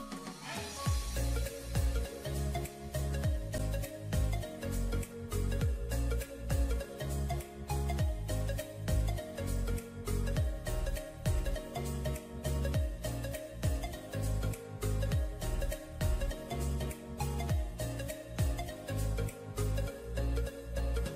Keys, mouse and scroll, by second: 3.7 alt+scroll up 1, 7.5 right click, 8.8-9.8 ], 13.7-14.4 typing, 18.2 alt+scroll up 1, 20.3 ctrl+z.